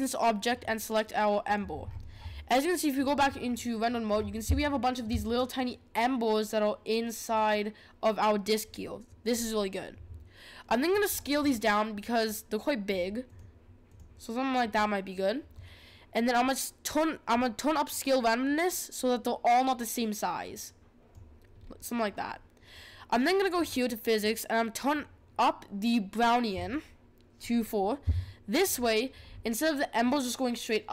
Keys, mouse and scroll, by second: 0.4 click, 1.8-3.1 scroll up 8, 3.1 click, 3.5-4.1 middle drag, 4.1 scroll up 6, 4.6-7.6 shift+middle drag, 9.3-10.9 scroll down 3, 10.9 scroll down 1, 11.1-11.7 scroll up 2, 11.7-12.8 scroll up 1, 12.8-17.0 drag, 17.3-20.3 drag, 21.5-22.1 scroll down 4, 22.1-23.5 scroll down 1, 23.5-28.7 drag, 29.2-30.9 scroll down 5.